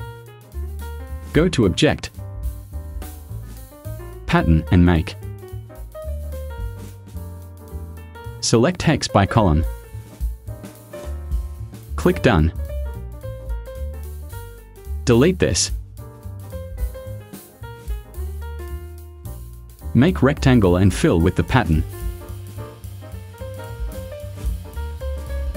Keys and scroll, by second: 0.3 v, 16.1 Delete.